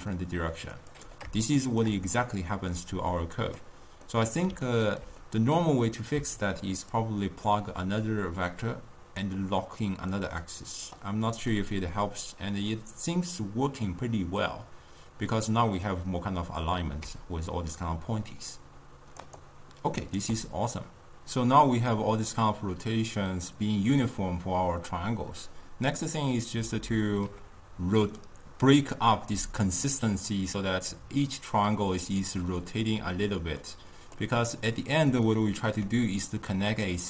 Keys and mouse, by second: 1.2 click, 1.5-9.3 shift+middle drag, 9.3 click, 11.0 click, 11.7-15.0 middle drag, 17.7-19.5 drag, 19.5 right click, 32.0-37.0 middle drag.